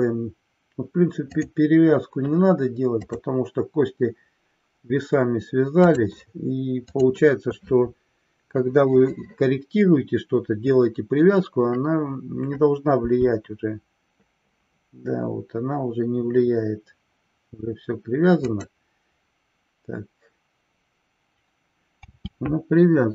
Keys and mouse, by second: 1.3 click, 3.0-6.0 drag, 6.9-7.8 drag.